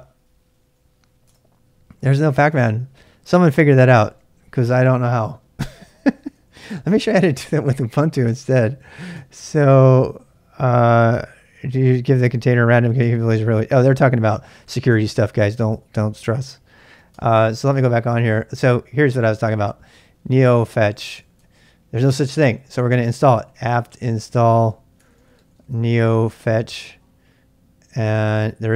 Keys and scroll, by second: 0.0-1.3 typing, 5.7-6.8 typing, 7.4 Up, 7.5 Up, 8.1 Up, 17.1 Return, 19.1-21.7 typing, 23.2-27.3 typing.